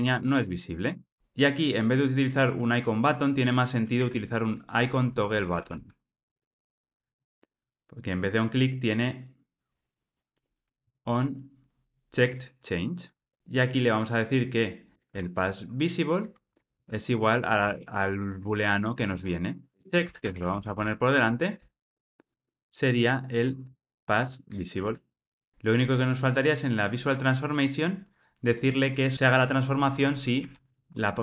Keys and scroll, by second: 3.9 super+z, 7.0 super+z, 7.1 Return, 12.1 Return, 16.4 Return, 17.9 Escape, 24.4 Return, 25.5 super+z.